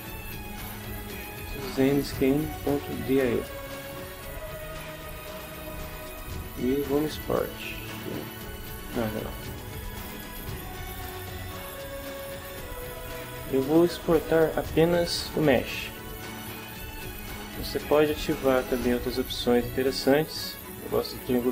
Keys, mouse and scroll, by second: 0.0-0.8 typing, 5.8 click, 15.5 click, 21.2 click.